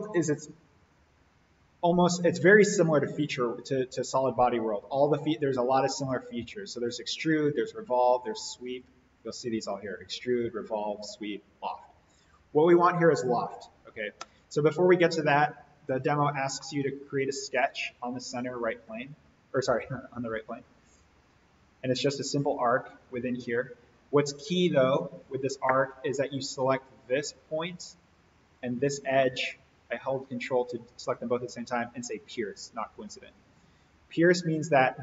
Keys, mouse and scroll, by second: 2.8 click, 8.7 click, 12.1 click, 15.1 click, 16.5-18.1 middle drag, 18.9 alt+s, 21.1-21.6 scroll down 1, 21.6 a, 22.5 click, 25.1 Escape, 25.6-26.3 middle drag, 27.0 click, 29.2-30.5 middle drag.